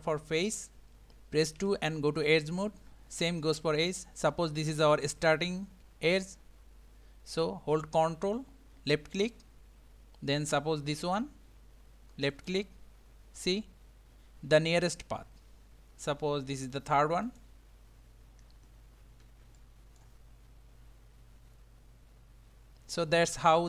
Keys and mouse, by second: 1.6 2, 9.1 ctrl+click, 19.6 shift+middle click.